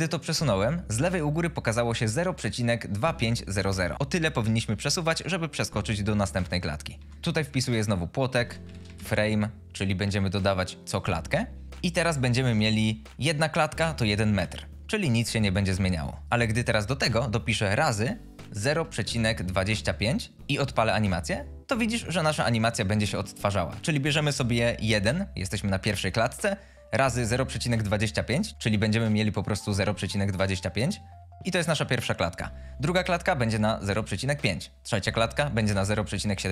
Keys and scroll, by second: 6.9 g, 7.2 #, 8.4 f, 8.6 r, 8.9 m, 9.0 e, 12.0 Return, 14.0 space, 17.8-19.9 typing, 20.3 Return, 20.9 space.